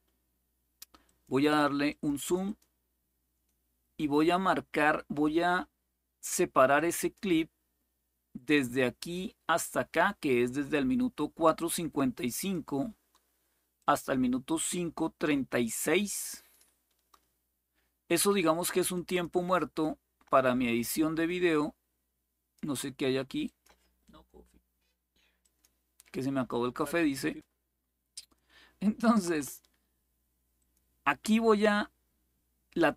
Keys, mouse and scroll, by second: 0.8 click, 1.2 click, 1.6 click, 5.9 click, 6.5 click, 12.1 click, 13.5-16.4 drag, 18.7 click, 19.3-22.3 drag, 23.2 click, 25.2 click, 26.5-28.1 drag, 30.3 click.